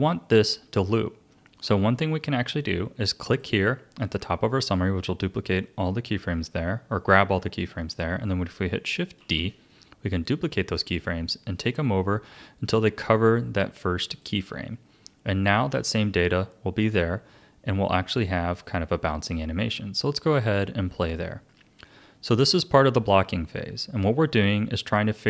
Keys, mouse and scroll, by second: 3.2 click, 9.2 shift+d, 15.4-18.5 drag, 20.3-24.1 drag.